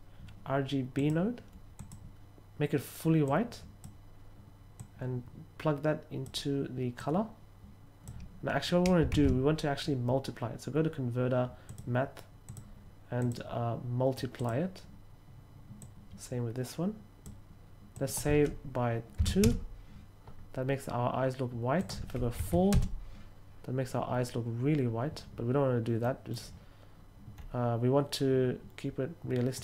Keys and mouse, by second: 0.9 click, 1.7 click, 3.1-3.7 drag, 4.7-6.2 drag, 6.9-7.9 drag, 9.0 shift+a, 11.5 click, 12.4 click, 13.1 click, 14.3 click, 15.7-17.1 drag, 17.8 click, 21.7 click, 22.6 Return, 25.9 middle click, 29.5 click.